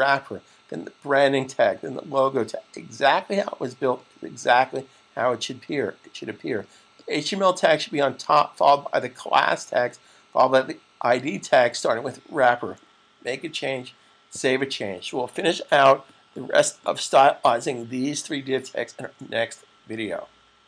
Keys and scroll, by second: 14.0 super+s.